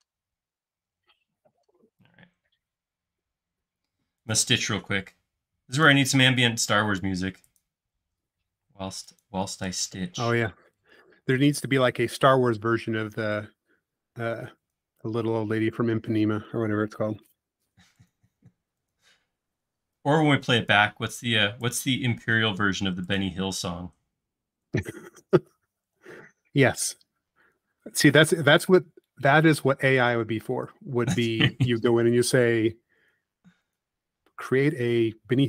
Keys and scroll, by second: 0.0 typing, 1.1-1.8 typing, 5.0 Up, 8.0 l, 9.6 Up, 11.8 |, 13.2 Up, 16.7 Up, 22.2 Up, 26.2 Up, 30.5 l, 31.4 Up.